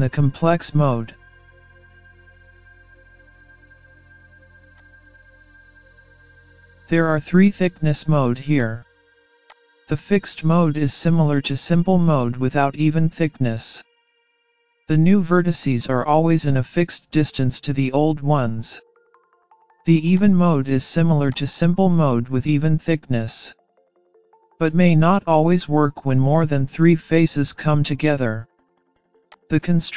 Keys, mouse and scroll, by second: 4.7 click, 8.6 click, 20.2 click, 29.4 click.